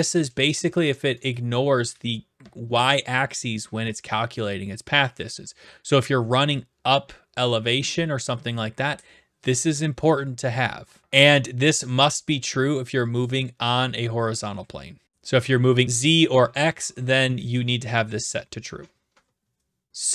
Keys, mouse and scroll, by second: 1.5 right click, 13.4-14.5 right drag.